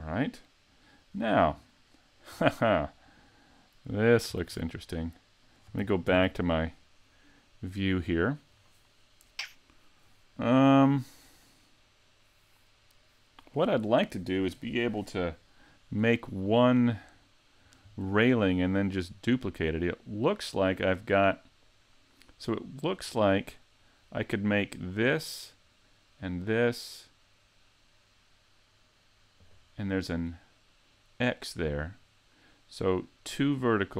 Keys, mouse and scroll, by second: 0.4 middle click, 1.1 scroll up 4, 1.6 shift+middle click, 2.5-3.6 scroll down 3, 4.4 s.